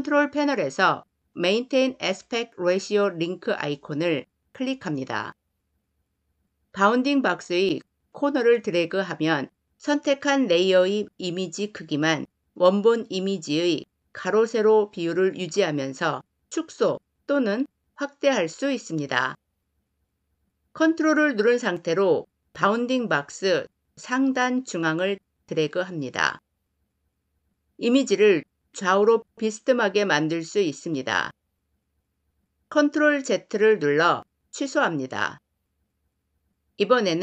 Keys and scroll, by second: 32.8 ctrl+z.